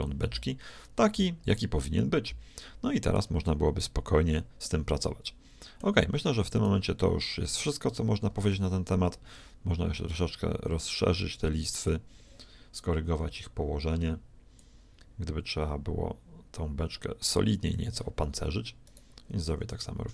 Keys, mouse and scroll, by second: 4.7-5.7 middle drag, 6.7-8.6 right drag, 8.3 s, 14.6-16.4 drag, 18.8-20.1 right drag, 19.4 s.